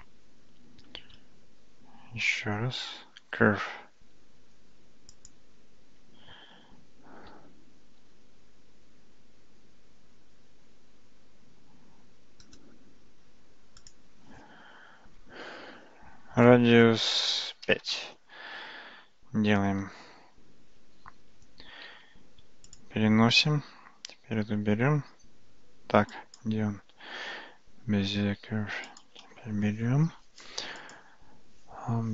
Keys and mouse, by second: 1.2 shift+a, 8.0 s, 13.8-18.7 drag, 19.8 Tab, 21.9 Tab, 21.9 g, 26.2-26.5 drag, 29.0 click, 31.0-32.1 drag.